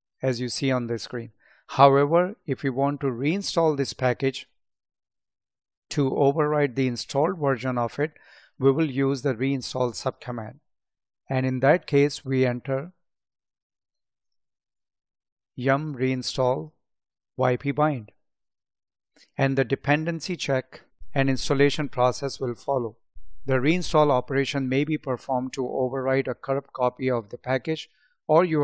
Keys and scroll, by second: 11.2 Up, 11.7 Left.